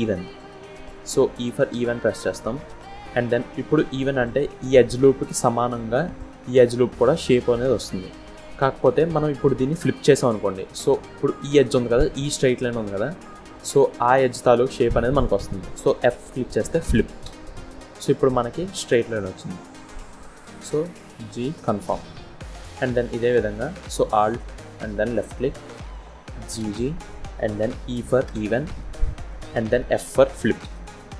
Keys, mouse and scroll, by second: 22.9 click, 24.9 alt+click, 26.5 g.